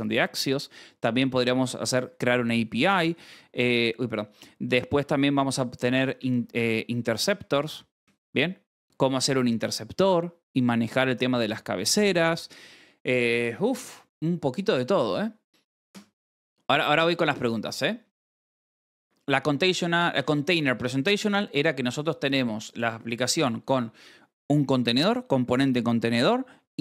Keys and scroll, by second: 1.4-2.5 typing, 4.3 o, 4.8 space, 5.9-8.7 typing, 9.0 ctrl+s, 10.5 s, 14.0-15.8 scroll, 20.7 scroll.